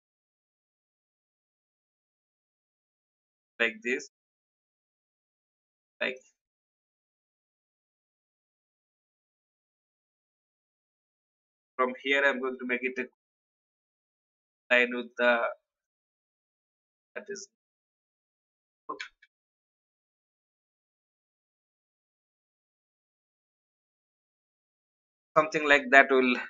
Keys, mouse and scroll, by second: 0.0 click, 0.8 alt+scroll up 1, 1.4 ctrl+v, 2.4-4.3 drag, 4.7 shift+click, 6.9-7.6 shift+scroll up 2, 8.7-10.3 drag, 11.2 Right, 11.4 Right, 12.1 ctrl+g, 13.0 shift+click, 19.2 click, 20.7 shift+scroll up 1, 22.2 click, 22.9 shift+Right, 23.7 Left, 24.0 Left, 24.9-25.2 alt+scroll down 1, 25.6-26.4 drag.